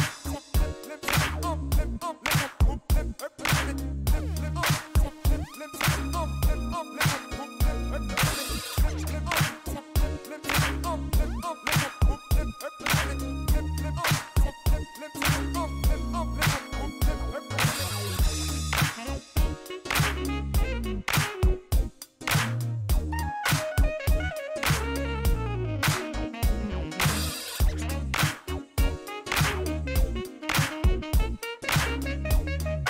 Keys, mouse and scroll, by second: 0.1 click, 0.8 KP_1, 0.9 KP_5, 1.1 KP_0, 1.2 KP_Enter, 2.6 click, 3.2 click, 4.2 click, 5.7 click, 6.6-7.5 typing, 8.3 middle click, 9.9 click, 11.4 click, 13.1-13.9 typing, 17.2 click, 18.0-18.9 typing, 20.5 click, 23.6 click, 24.1 click, 26.0 click, 27.8 click, 28.9-29.2 scroll down 2, 29.9 scroll down 1, 30.6 scroll down 1.